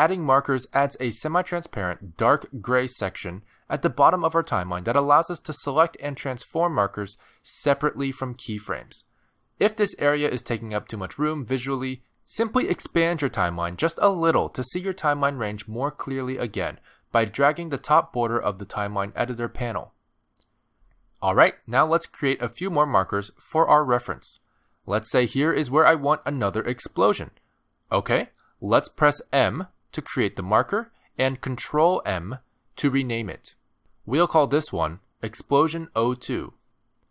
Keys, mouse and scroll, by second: 9.1 click, 11.7 click, 16.4 click, 17.2 click, 18.0 click, 18.9 click, 20.7 click, 24.3 click, 26.0 click, 30.0 m, 32.5 ctrl+m.